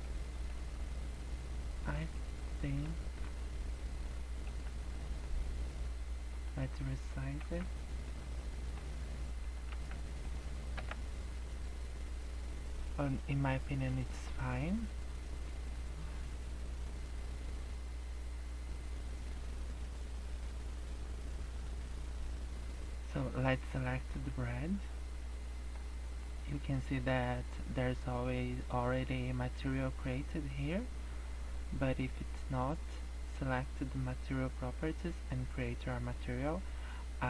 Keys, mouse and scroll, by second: 0.5 middle click, 2.1 middle click, 4.3 scroll down 1, 4.4 middle click, 4.8 scroll down 4, 4.9 middle click, 6.3 click, 7.4 s, 8.3 middle click, 9.4 click, 9.7 s, 10.7 KP_0, 11.3-11.7 scroll up 8, 13.5 scroll up 1, 14.9 scroll down 3, 15.7 scroll up 2, 16.5-17.9 scroll down 2, 18.6 scroll up 2, 19.7 scroll up 3, 20.5-21.1 scroll down 7, 21.5 scroll up 1, 24.1 click, 25.6-26.5 scroll up 10, 26.7 middle click, 27.3-27.6 scroll up 3, 33.4 click.